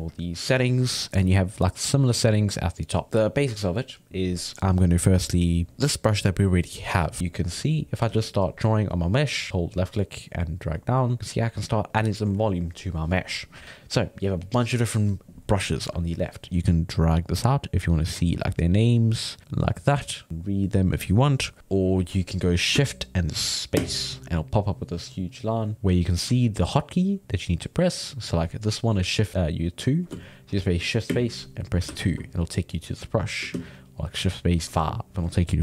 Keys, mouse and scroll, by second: 7.5 click, 8.1 ctrl+z, 8.4-9.5 drag, 9.5-10.8 middle drag, 10.8 click, 11.2-13.0 middle drag, 13.6 ctrl+z, 17.6-20.3 drag, 23.8 shift+space, 31.1 shift+space, 33.5 shift+space.